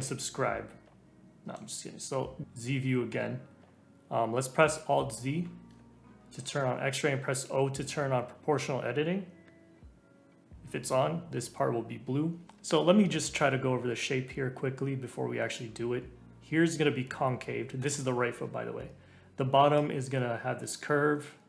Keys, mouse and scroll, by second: 1.4 middle click, 2.4-3.7 scroll down 2, 5.4 alt+z, 7.1 o, 15.5-18.5 drag, 19.7-21.4 drag.